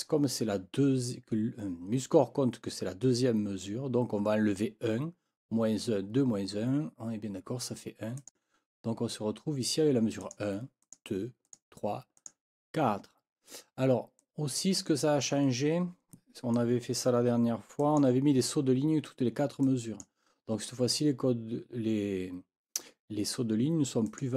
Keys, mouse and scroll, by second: 8.2 click, 10.2 click, 10.8 click, 11.4 click, 12.2 click, 14.2-15.4 drag, 16.5 click, 24.1-24.3 scroll up 1.